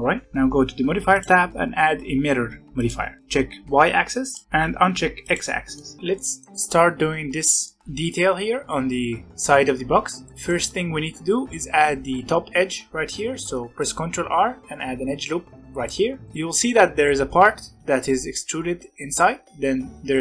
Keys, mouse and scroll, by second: 0.2 Tab, 0.2 middle click, 1.1-3.2 drag, 3.2-4.2 middle drag, 4.2 click, 5.1 click, 5.7 middle click, 6.0 scroll down 1, 6.1 middle click, 6.5-7.5 scroll up 2, 7.5-9.9 middle drag, 10.2-13.3 middle drag, 13.3 ctrl+r, 16.2 middle click, 16.6-17.5 scroll up 1, 17.5-19.6 scroll up 1.